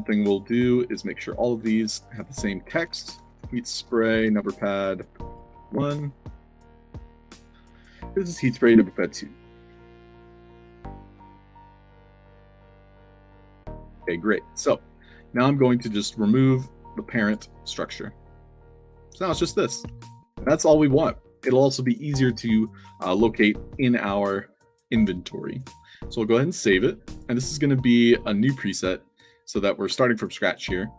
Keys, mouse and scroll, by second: 0.8 click, 1.6 click, 2.1 click, 2.6-5.1 typing, 5.6 ctrl+a, 5.9 ctrl+c, 7.0 click, 7.9 click, 8.7 2, 10.8-11.6 typing, 12.2 click, 12.7 f, 13.4-14.2 alt+drag, 15.0 click, 15.9-17.2 drag, 17.7 click, 18.8 click, 19.8 ctrl+z, 20.4 alt+click, 26.2 click, 27.2 click, 28.4 click.